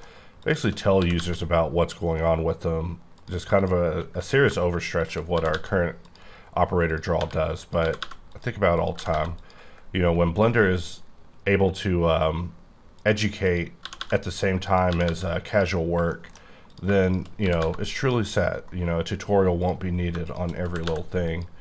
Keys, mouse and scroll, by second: 0.4 shift+click, 1.0 g, 1.1 g, 2.1 right click, 3.1 click, 5.3 g, 5.5 g, 6.0 click, 6.9 click, 7.2-9.1 typing, 7.6 click, 8.3 click, 8.7 click, 9.4 click, 13.0 click, 13.5 click, 13.8 g, 14.0 g, 14.3 click, 14.6 click, 14.9 g, 15.1 g, 15.5 click, 15.8 scroll down 2, 16.1 shift+middle click, 16.7 click, 17.4 g, 17.6 g, 18.0 click, 19.6 click, 20.2 shift+click, 20.6 g, 20.9 g, 21.3 click.